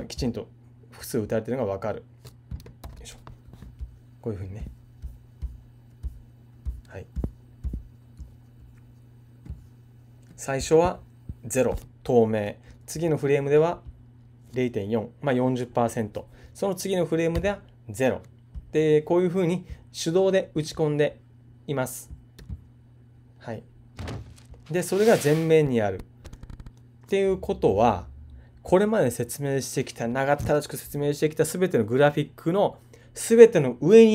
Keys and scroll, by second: 2.8 super+f.